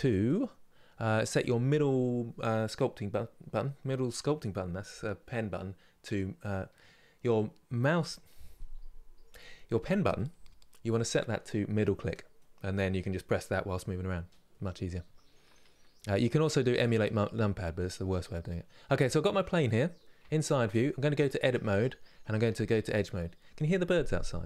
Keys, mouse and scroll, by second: 18.2-19.9 middle drag, 19.9 KP_3, 20.8 Tab.